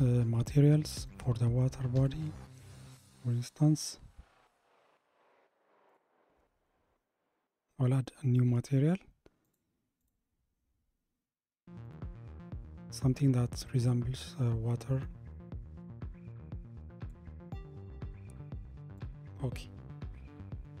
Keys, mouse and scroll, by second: 1.0 click, 2.0-9.7 drag, 10.1 click, 19.0 click.